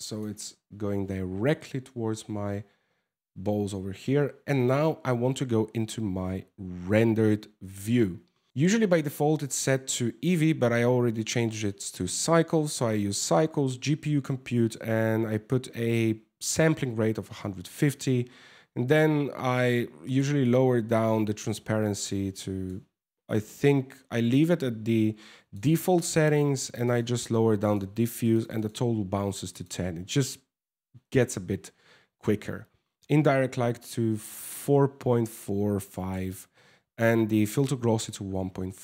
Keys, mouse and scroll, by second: 0.9 KP_0, 1.9 scroll up 3, 3.4 scroll down 2, 3.8 scroll up 1, 6.8 shift+w, 8.5 click, 19.0 click, 20.0 click, 23.1 click, 23.5 click, 26.6 click, 27.2-28.1 click, 27.8 click, 29.1 click, 31.0 ctrl+s, 33.8 click, 38.0 scroll down 3, 38.1 scroll up 1, 38.2-38.8 scroll down 8.